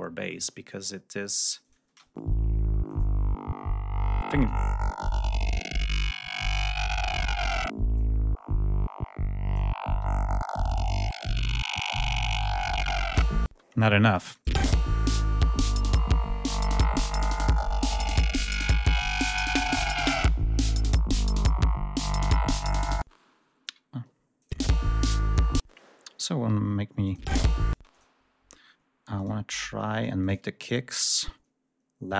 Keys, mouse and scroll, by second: 0.1-0.4 scroll up 2, 0.6 scroll down 2, 1.5 click, 1.8 space, 2.8 click, 6.4 click, 7.9 click, 13.4 space, 14.4 space, 17.1 ctrl+scroll down 2, 17.8 ctrl+scroll up 2, 18.5-19.1 ctrl+scroll up 3, 20.8-21.5 ctrl+scroll down 4, 21.7 ctrl+scroll up 2, 22.9 space, 23.3 scroll down 1, 24.3 ctrl+click, 24.4 space, 24.6 ctrl+scroll up 1, 25.2 ctrl+scroll up 1, 25.5 ctrl+space, 27.0 click, 27.1 space, 27.8 click, 29.1 click, 31.0 ctrl+scroll down 2, 31.6 ctrl+scroll down 2.